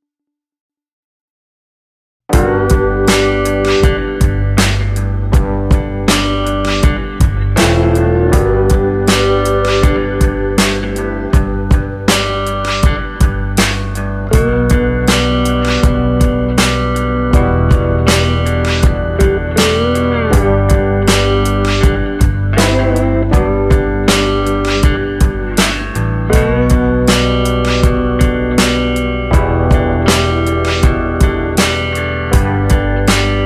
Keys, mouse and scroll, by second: 1.0 scroll down 1, 1.1 middle click, 2.1 click, 5.3 click, 6.3 click, 8.2 scroll down 3, 8.4 middle click, 9.1 scroll up 2, 9.7 click, 11.1 click, 11.6 scroll down 2, 11.7 middle click, 12.3 scroll up 2, 13.6 click, 15.4 click, 15.4 [, 18.0 click, 18.8 click, 19.8 click, 21.0 click, 21.8 click, 22.3 click, 23.4 click, 24.3 click, 25.0 click, 25.8 click, 26.7 click, 27.3 scroll up 1, 27.7 shift+middle click, 28.2 scroll up 1, 28.8 click, 29.5 shift+f, 30.4 click, 31.1 click, 31.9 click, 32.8 click.